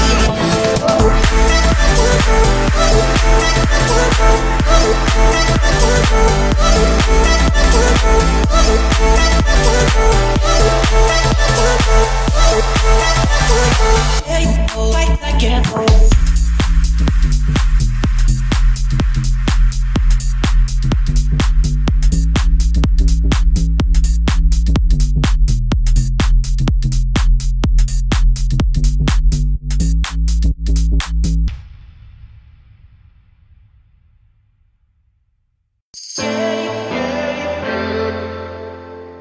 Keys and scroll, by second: 1.9 Escape, 20.5 Escape, 23.9 Escape, 27.5 2.